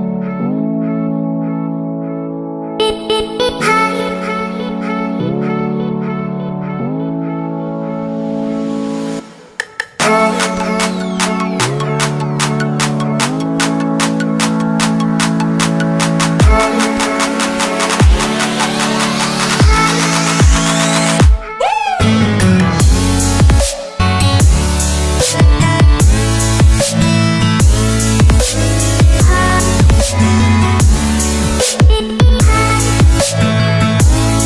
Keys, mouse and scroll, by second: 2.0 right click, 2.8 click, 10.1 scroll up 1, 10.8-14.2 scroll up 1, 14.2 click, 15.2-16.3 scroll down 1, 16.3 click, 20.5 Return, 21.5 click, 22.1 Delete, 22.7 click, 23.1 right click, 25.6 click, 27.1 ctrl+t, 27.5 click, 31.8 Return, 32.9 click.